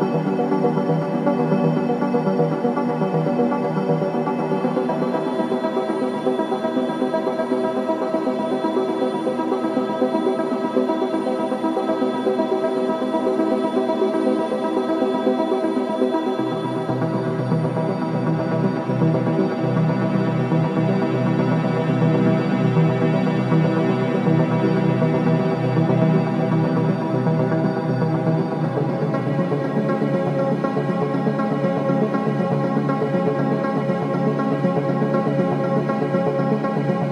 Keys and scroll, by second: 6.9 ctrl+z, 8.9 ], 10.9 ], 12.2 4, 12.5 shift+i, 13.1 4, 24.2 ], 30.3 ctrl+z, 32.7 ctrl+d, 32.8 Escape, 34.7 ].